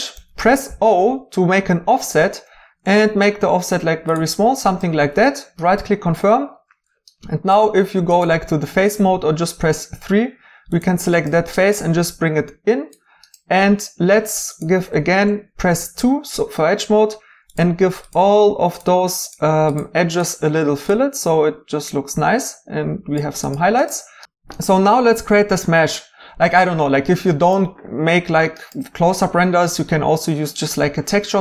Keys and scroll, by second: 0.1 o, 9.1 3, 14.9 Tab, 15.8 Tab.